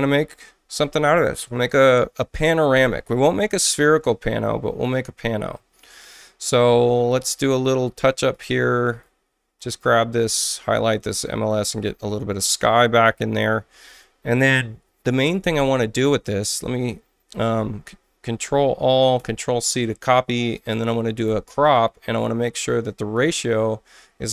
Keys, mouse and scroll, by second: 0.5 alt+middle click, 7.1 click, 8.3 alt+right click, 11.1 click, 17.5 ctrl+a, 19.2 ctrl+c, 21.2 c, 22.4 click, 22.9 click, 24.0 4.